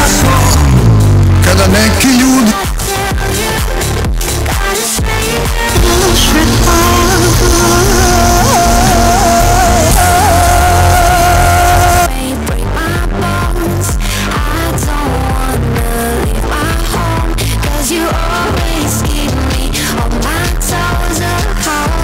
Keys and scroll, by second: 2.4 Page_Down, 12.0 Page_Down.